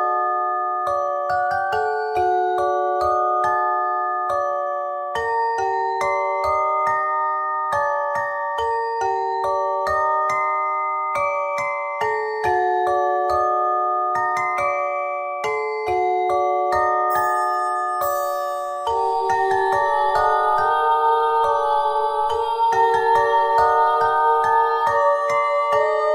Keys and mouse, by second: 0.4 Tab, 1.6 middle click, 2.6 middle click, 3.8 Tab, 5.1 e, 7.7 KP_1, 8.8 z, 10.6 s, 12.2 click, 15.1 c, 17.0-18.1 drag, 18.1 c, 19.3 click, 20.3 c, 20.5 click, 22.6 c, 23.8 click, 25.2 c, 25.6-26.1 drag.